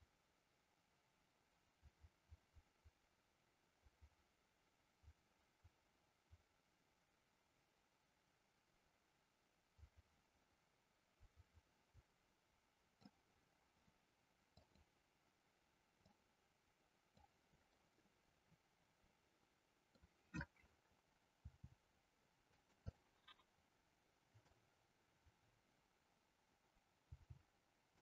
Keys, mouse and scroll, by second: 14.6 click, 16.1-17.3 drag, 17.6-20.1 middle drag, 21.5 r, 22.6 click, 23.0-24.5 middle drag, 27.0 g.